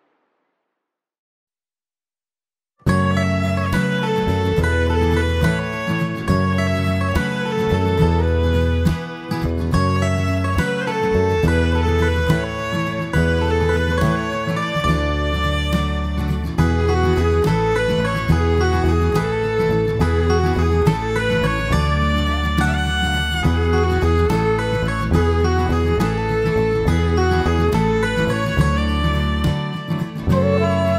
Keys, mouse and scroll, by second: 10.9-11.5 scroll up 2, 11.5 middle click, 11.5 scroll up 1, 11.8 shift+middle click, 12.2 scroll up 2, 12.7 shift+middle click, 23.6 click, 24.7 click, 30.8 click.